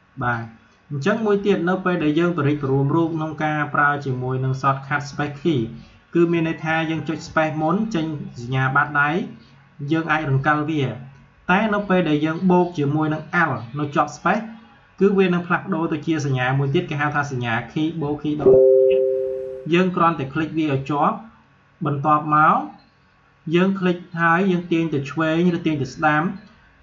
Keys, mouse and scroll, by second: 0.1 space, 0.3 click, 1.3 space, 8.8 click, 9.4 space, 13.2 space, 16.1-26.8 alt+drag.